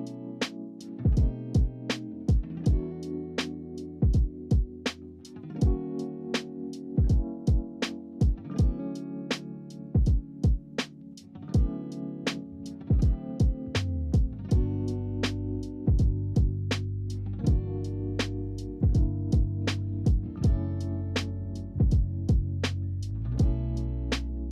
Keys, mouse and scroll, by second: 0.5 s, 1.3-2.3 shift+middle drag, 2.3-3.0 scroll up 4, 3.0 click, 3.3 scroll down 3, 3.6-4.5 middle drag, 4.5-5.2 scroll up 12, 5.2 scroll down 4, 5.4-6.8 middle drag, 6.8-7.8 scroll down 2, 7.8 click, 9.5 KP_Decimal, 10.2 scroll down 5, 10.6-11.9 middle drag, 11.9-12.4 scroll down 4, 12.4 middle click, 13.0 click, 13.2 scroll down 1, 13.5-15.7 middle drag, 15.7 ctrl+s, 19.8-20.5 scroll up 3, 20.5-23.1 middle drag, 23.1-24.4 scroll down 4, 24.4 scroll down 1.